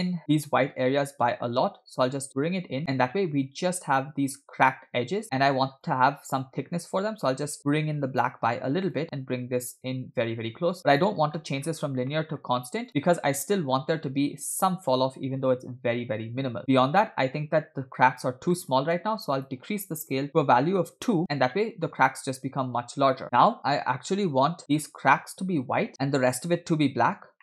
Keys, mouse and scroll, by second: 1.7-4.1 drag, 5.9 click, 9.0 click, 11.4-12.1 scroll up 4, 12.1 middle click, 12.9 click, 13.8-14.5 scroll up 3, 14.7-15.6 scroll up 1, 16.0-16.8 scroll down 4, 17.1-17.9 scroll down 1, 18.6 middle click, 19.4-20.9 drag, 21.6-21.9 scroll down 2, 21.9-23.0 scroll up 2, 23.0-23.6 scroll down 6, 23.6 scroll up 3.